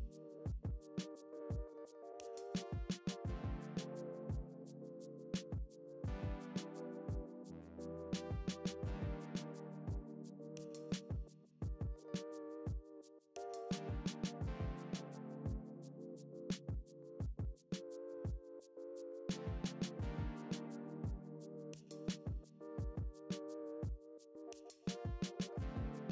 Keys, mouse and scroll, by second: 0.1 ctrl+a, 1.2-5.3 drag, 5.3 ctrl+a, 5.7-7.2 drag, 7.2 alt+a, 8.9 shift+a, 9.3 alt+g, 9.5 s, 10.7-11.2 scroll down 4, 10.8 KP_7, 11.2 s, 11.7 click, 12.2 click, 12.6 scroll up 1, 12.8 s, 13.3 click, 13.6 g, 14.7 click, 14.9 KP_0, 15.1-15.7 scroll up 2, 15.3 ctrl+a, 15.7 g, 16.7 click, 16.9 s, 17.5-19.3 drag, 19.3 alt+a, 20.0 click, 22.6 ctrl+a, 23.0-23.5 scroll up 1, 23.5 click, 24.5 alt+a, 24.5-25.1 scroll down 1.